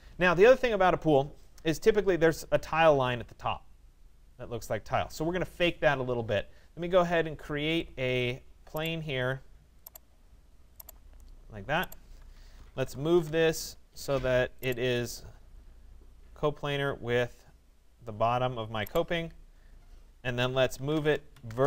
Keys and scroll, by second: 12.7 Return, 20.7 Return.